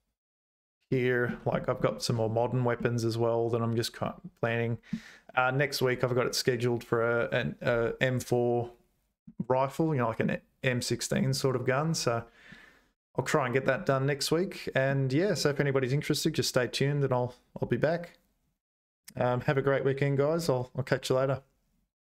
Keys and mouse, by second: 0.9 middle click, 1.9 shift+middle click, 2.8-4.9 middle drag, 13.9 middle click.